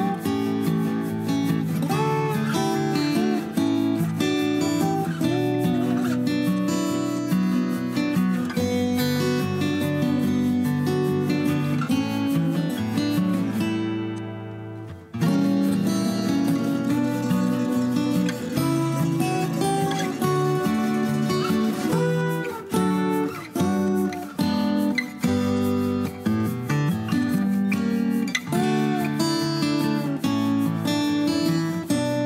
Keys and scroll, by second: 3.4 Delete, 3.7 Delete, 4.7 p, 6.4 Escape, 6.7 m, 8.0 3, 8.4 BackSpace, 8.6 BackSpace, 8.7 Return, 8.9 Escape, 11.1 typing, 13.6 r, 19.1-20.8 typing, 27.0 Escape, 27.8 ctrl+g.